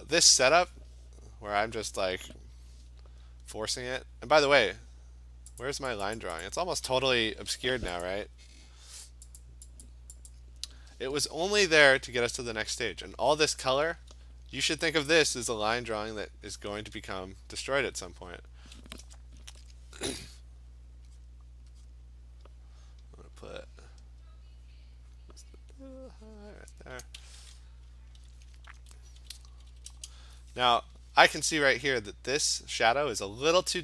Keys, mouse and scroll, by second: 5.7 click, 6.1 click, 6.4 click, 6.6 click, 8.1 click, 9.4 click, 9.9 click, 10.3 click, 14.9 [, 15.4 [, 15.6 [, 16.8 [, 17.8 click, 18.5 click, 19.5 ctrl+z, 21.2 click, 21.9 click, 25.2 click, 25.7 click, 26.7 click, 29.1-30.1 typing, 33.3 click.